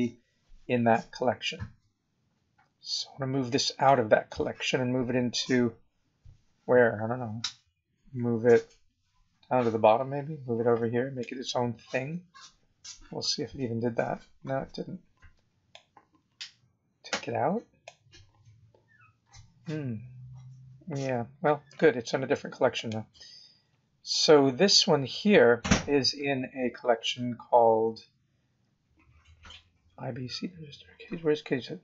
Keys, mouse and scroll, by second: 1.8-2.1 scroll up 2, 2.3-2.6 scroll down 2, 3.8 click, 7.1-9.4 scroll down 23, 12.5-13.5 scroll up 15, 15.7 click, 20.6-20.9 scroll up 2, 21.3 scroll down 2, 22.7 click, 23.7-25.1 scroll down 11, 25.2-25.7 scroll up 8, 26.2 scroll up 2, 27.6 scroll up 2, 30.9-31.3 scroll down 4.